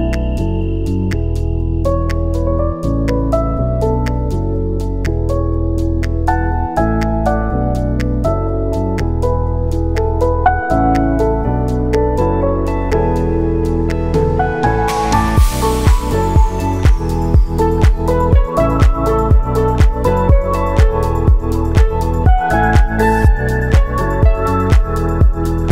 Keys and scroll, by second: 1.3 space, 8.5-9.4 typing, 12.4-13.3 typing, 14.1 ctrl+s, 15.9 F9, 18.0 space, 22.1 space, 23.1 r.